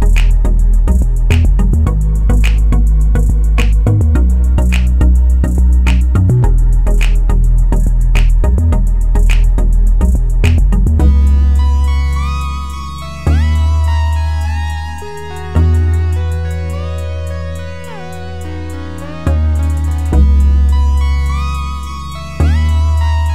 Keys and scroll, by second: 19.6-20.7 typing, 20.8 Return, 22.3-23.3 typing.